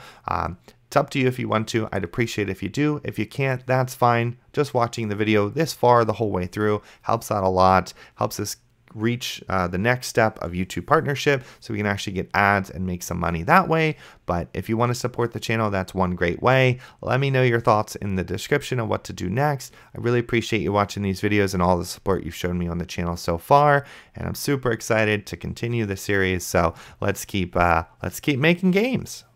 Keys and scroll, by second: 0.0-2.6 typing, 4.9-6.5 typing, 7.6 a, 12.3 a, 12.6 space, 14.2-17.6 typing, 20.0-21.5 typing, 22.6 a, 27.3 a, 27.7 space, 29.2 d.